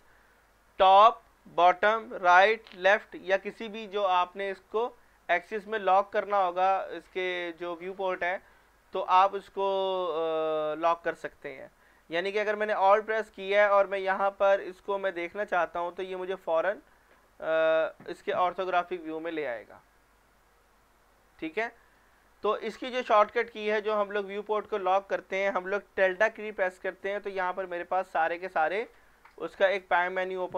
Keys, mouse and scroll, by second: 12.9-13.5 middle drag, 14.5-16.3 alt+middle drag, 21.6 scroll down 1, 22.0 middle click, 22.5 scroll up 1, 23.5 middle click, 24.0 shift+middle click.